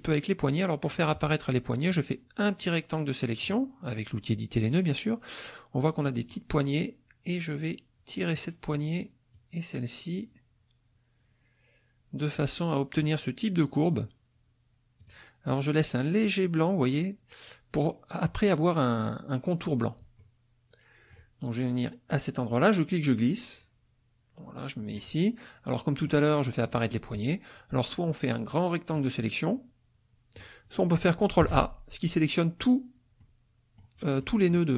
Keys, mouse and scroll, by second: 1.9-3.6 drag, 6.3-8.5 drag, 9.3-13.1 drag, 15.0 click, 20.1-21.3 middle drag, 22.6-25.1 drag, 25.7 middle click, 28.9-30.6 drag, 31.0 click, 31.3-33.3 ctrl+middle drag, 31.4 ctrl+a, 33.3 click, 34.2 click.